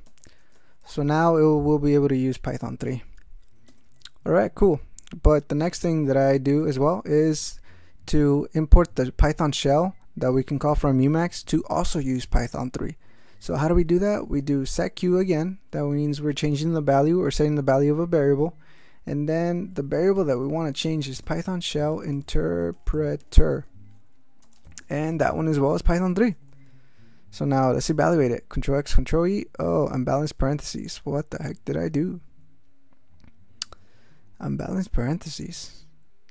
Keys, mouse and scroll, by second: 0.0 alt+m, 0.4 ctrl+alt+space, 0.5 ctrl+alt+e, 0.8 ctrl+alt+g, 3.7 Return, 6.6 shift+9, 13.6-15.3 typing, 19.5-26.8 typing, 28.0 ctrl+x, 28.3 ctrl+e, 30.1 q.